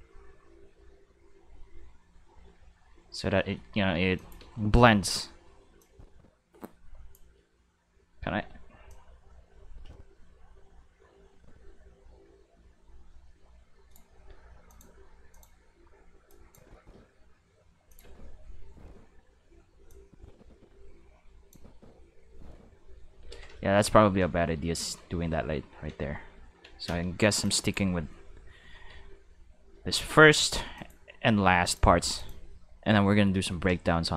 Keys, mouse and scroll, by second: 3.9 space, 4.1 click, 4.4 space, 5.7 space, 5.8-7.1 drag, 8.1 a, 8.9-13.9 drag, 14.7 click, 15.3 click, 16.3 drag, 16.7 space, 17.7 space, 17.9 click, 18.0 space, 19.8 space, 19.9-21.5 drag, 21.7 space, 23.2 space, 23.5 ctrl+z, 23.6 ctrl+z, 24.2 ctrl+z, 24.6 ctrl+z, 25.0 ctrl+z, 25.9 ctrl+z, 26.8 space, 27.2 space, 27.4-27.7 drag, 27.8 space, 28.9 space, 30.7 click, 31.6 click, 32.1 click, 33.1 middle click, 33.8 middle click, 34.0 middle click.